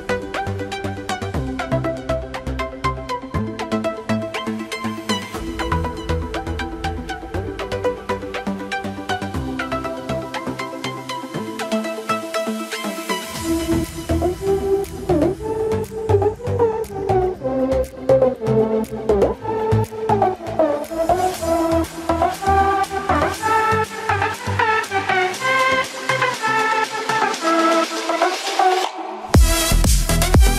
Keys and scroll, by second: 9.1 ctrl+alt+shift+e, 17.4 ctrl+j, 25.8 ctrl+=.